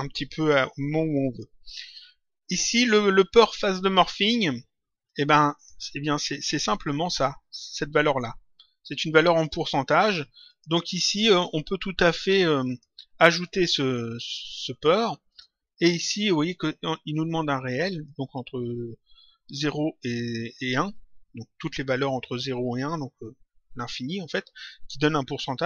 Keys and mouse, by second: 5.0 click, 10.4 click, 12.6 click, 14.7 right click, 15.2 click, 17.8 click.